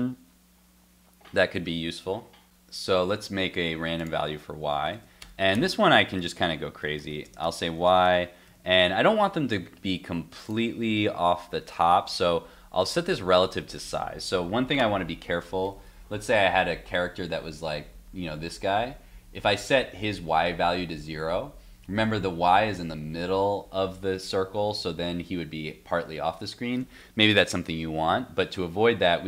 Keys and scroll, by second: 8.5 super+s, 9.2 super+Tab, 11.9 super+Tab, 15.0 alt+Tab.